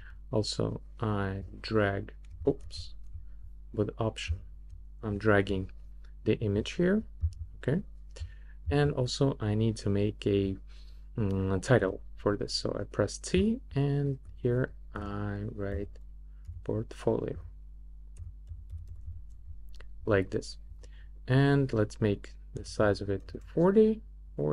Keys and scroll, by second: 2.6 super+z, 11.8 t, 14.9-19.5 typing, 22.3-23.3 typing.